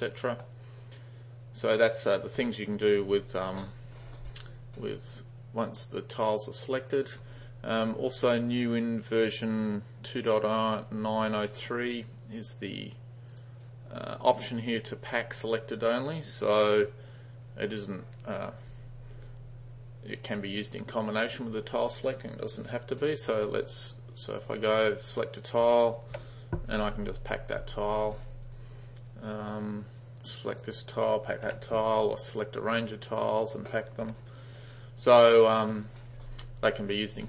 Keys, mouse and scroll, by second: 1.7 click, 6.7 click, 13.4 click, 24.4 click, 28.5 click, 30.0 drag, 32.2 click, 32.6-33.3 drag, 34.1 ], 35.3 click.